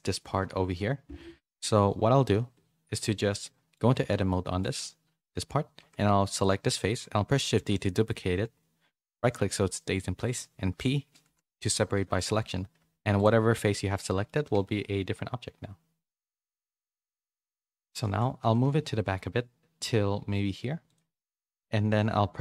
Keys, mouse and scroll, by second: 0.0 middle click, 3.4 middle click, 3.9 Tab, 4.3 middle click, 5.8 3, 6.3 click, 7.3 shift+d, 12.8 Tab, 13.6 middle click, 17.0 KP_3, 18.0 shift+middle click, 18.1 middle click, 18.4 g, 21.4 middle click.